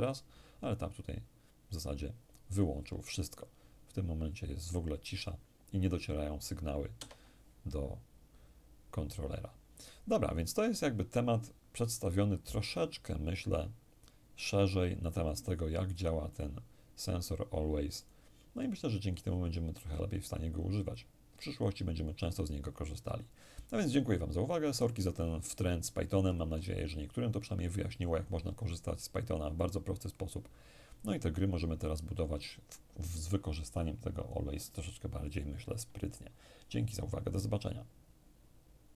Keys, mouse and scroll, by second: 6.6 Escape, 15.6-18.7 drag, 26.4-27.5 ctrl+scroll down 2, 27.5-28.3 ctrl+scroll down 1, 28.3 ctrl+scroll down 1, 29.2-31.6 drag.